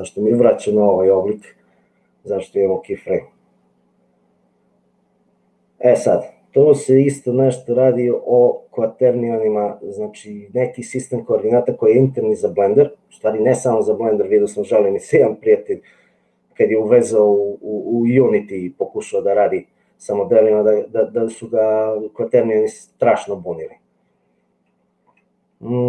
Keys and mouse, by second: 25.1 n.